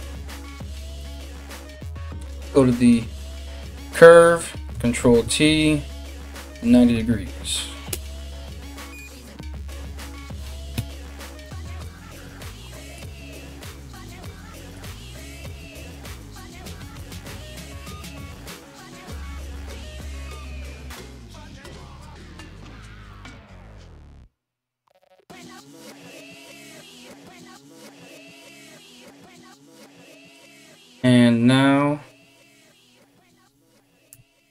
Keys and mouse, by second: 0.2 middle click, 0.2 right click, 0.6 middle click, 0.6 right click, 1.5 Tab, 4.7 ctrl+t, 10.4 KP_Decimal, 15.0 g, 20.0-34.5 middle drag, 22.7 g, 27.6 g, 33.7 Tab.